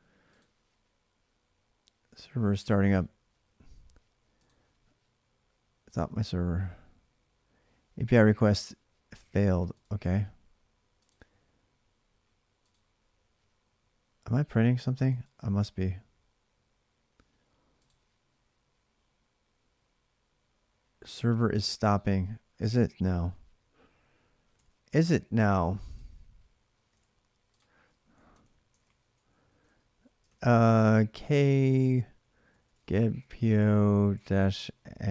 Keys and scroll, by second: 22.8 alt+Tab, 28.1 alt+Tab, 28.1 ctrl+c, 28.5 ctrl+[, 28.6-30.4 typing, 30.0 ctrl+c, 32.0-35.1 typing.